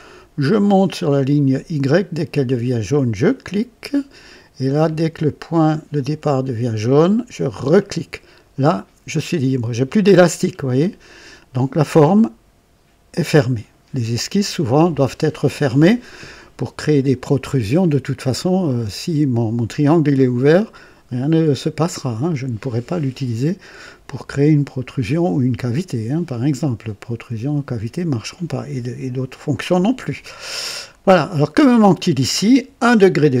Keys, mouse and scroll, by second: 3.2 click, 7.5 click, 30.9 right click.